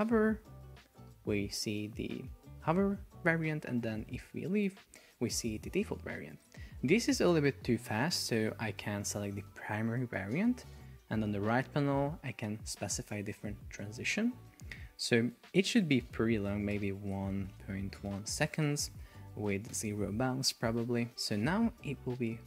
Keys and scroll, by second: 6.3 Escape, 15.3 Up, 15.9 Delete, 18.1 Return, 19.8 Return, 21.1 super+p.